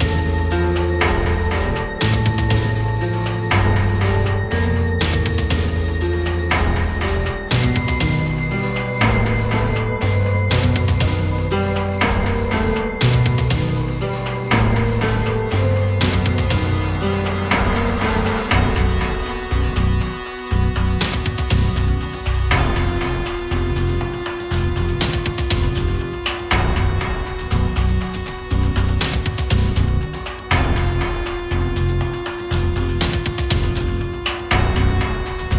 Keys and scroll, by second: 0.9 space, 4.3 space, 5.1 space, 5.8 space, 6.4 space, 7.8 space, 8.4 space, 8.9 space, 14.9 space, 17.9 space, 22.4 space, 23.1 space, 33.3 5.